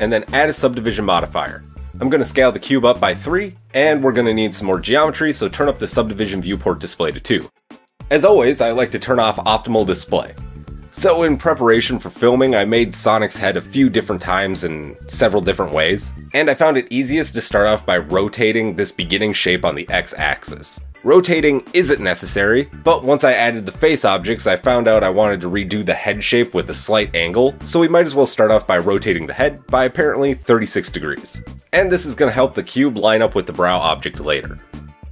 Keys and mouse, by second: 3.1 s, 10.7-33.4 shift+middle drag, 11.5 Tab, 12.0 Tab, 13.3 KP_3, 22.4 r, 29.4 g, 34.4 KP_1.